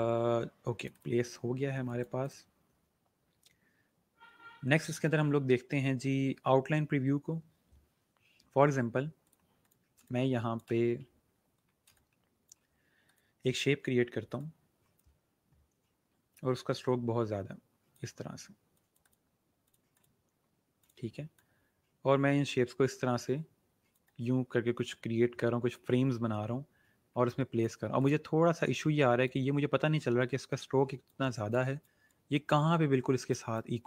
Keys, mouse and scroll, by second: 2.8 click, 9.2 click, 9.9 space, 10.0 click, 10.4 space, 11.3-11.8 alt+scroll up 2, 11.8 space, 12.2 click, 12.3 space, 13.0 click, 28.4-29.2 alt+scroll up 2, 29.2 click.